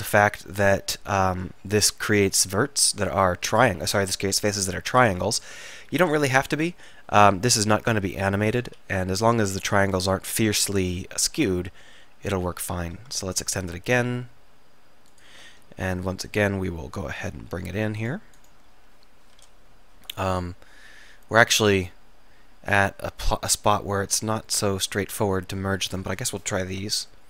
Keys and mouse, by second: 6.4 KP_3, 8.7 s, 10.9 s, 12.9 e, 14.4 e, 17.3 middle click, 18.0-19.3 drag, 21.7-23.6 drag, 23.6 middle click, 23.9 middle click, 26.8 alt+m.